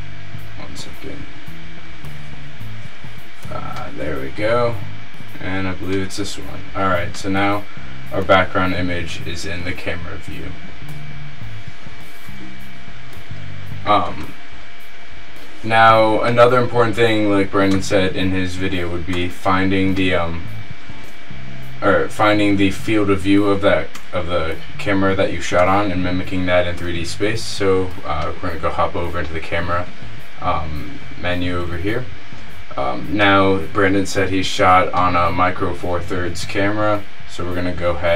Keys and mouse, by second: 1.6-3.9 middle drag, 5.6-7.8 middle drag, 11.5-20.6 middle drag, 20.9 KP_0, 22.1 click, 22.3 middle click, 28.4-30.2 middle drag, 33.3-36.6 middle drag.